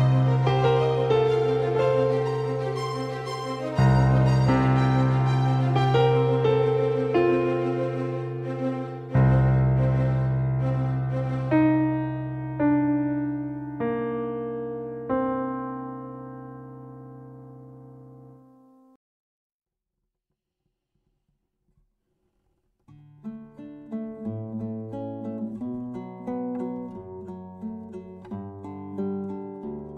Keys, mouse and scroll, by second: 3.3 g, 4.3-7.3 right drag, 5.6 g, 8.1-9.8 middle drag, 14.8 shift+a, 29.0-29.9 drag.